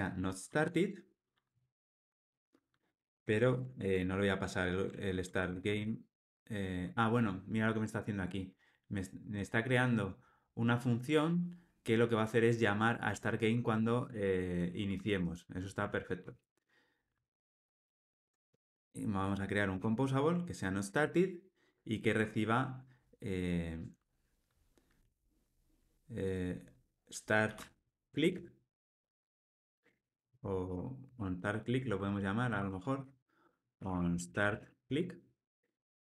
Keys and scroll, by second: 5.2 alt+shift+Right, 16.3 alt+Return, 18.0 alt+Return, 32.4 alt+shift+Left.